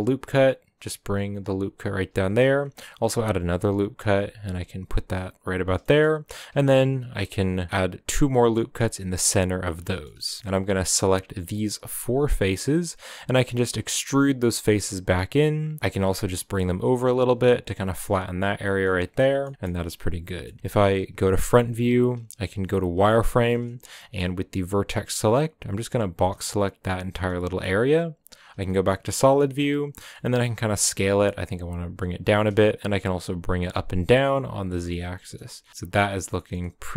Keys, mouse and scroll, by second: 2.3 ctrl+r, 5.8 shift+middle click, 6.0-6.5 scroll up 1, 6.5 ctrl+r, 9.9-10.4 shift+middle drag, 10.6 shift+right click, 11.5 shift+right click, 12.0 shift+right click, 12.3-12.6 middle drag, 12.6-13.1 scroll up 1, 13.1 e, 15.8 g, 18.6 scroll down 3, 18.8-20.3 middle drag, 20.3 scroll down 1, 20.4 middle click, 21.2 KP_1, 21.7 1, 23.1 z, 23.9-26.8 shift+middle drag, 24.2-26.8 scroll up 1, 26.8 b, 28.4 z, 28.6 middle click, 28.9-29.5 scroll down 4, 29.5-29.9 scroll down 3, 29.9 middle click, 30.3 s, 32.4 g, 34.8 s, 35.7-36.9 middle drag.